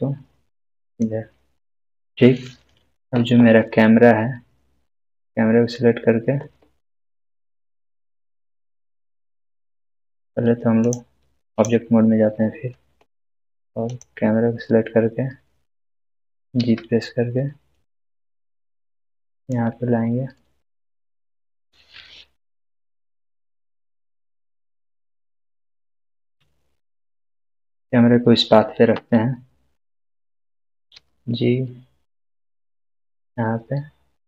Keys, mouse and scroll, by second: 0.9 click, 5.0 click, 8.7 click, 13.9 click, 16.5 click, 19.3 g, 19.4 click, 24.3-26.3 scroll down 1, 26.3 click, 26.4-27.3 shift+middle drag, 30.9 g, 32.9 click.